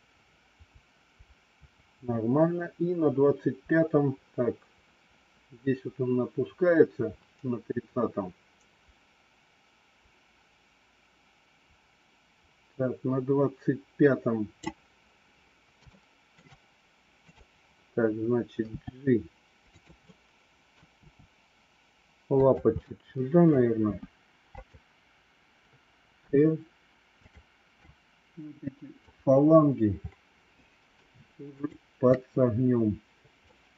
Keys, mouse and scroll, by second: 15.9 shift+middle click, 17.2 click, 18.6 g, 20.1 middle click, 20.9 g, 22.7 middle click, 23.9 g, 26.2 r, 27.7 click, 31.5 shift+click, 33.4 middle click.